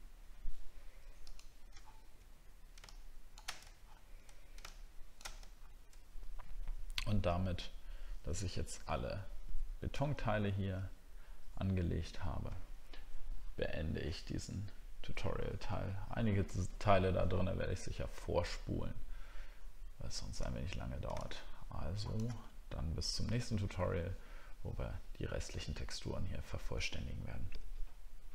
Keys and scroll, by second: 1.8 alt+scroll down 1, 5.5 alt+scroll down 1, 9.9 alt+scroll down 1, 10.0 alt+scroll up 1, 20.4 alt+scroll down 1.